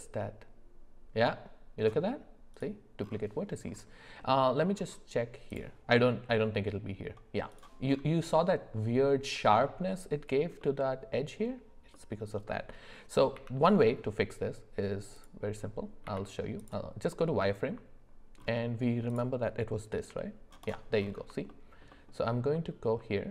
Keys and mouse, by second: 4.2 middle click, 5.5-7.9 drag, 10.6 middle click, 11.9 middle click, 13.3 z, 16.0 z, 19.1 click, 20.0 g, 21.5 alt+middle click, 22.5 middle click.